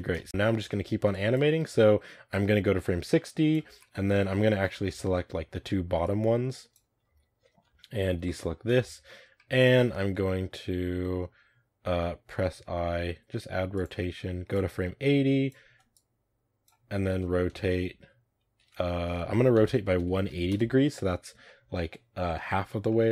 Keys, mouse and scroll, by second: 0.2 scroll up 1, 0.3 middle drag, 0.4 a, 1.0-1.5 drag, 1.5 a, 2.2-3.7 drag, 3.7 middle drag, 4.0 z, 4.2-4.7 middle drag, 4.7 a, 6.7 b, 7.0 z, 8.4 b, 8.8 z, 9.0 middle click, 9.2-13.8 scroll down 2, 9.3 middle click, 13.8 i, 14.4-17.1 drag, 17.1 r, 21.3-22.2 middle drag, 22.2-22.8 scroll up 1, 22.8-23.1 middle drag.